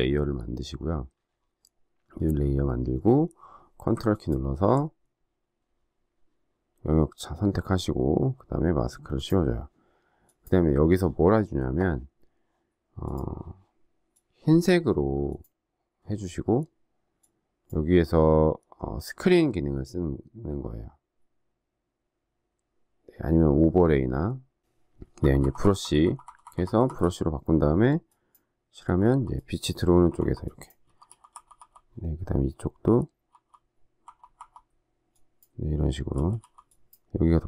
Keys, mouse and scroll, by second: 4.0 ctrl+click, 25.1-26.8 typing, 28.8-31.5 typing, 33.2-34.5 typing, 36.1 typing.